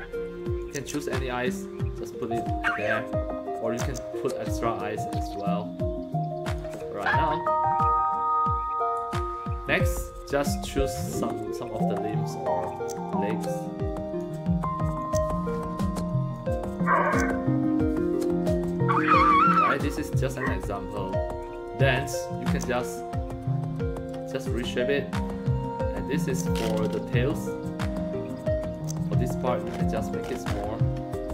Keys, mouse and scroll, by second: 0.6-2.2 drag, 3.6-6.5 drag, 7.5-8.9 right drag, 10.6 click, 12.7-14.2 drag, 15.0-16.3 drag, 17.0-18.5 drag, 19.2 click, 22.4-24.4 drag, 26.2-27.5 drag, 28.7 click, 29.1-29.6 scroll down 3, 30.0-30.4 scroll down 2.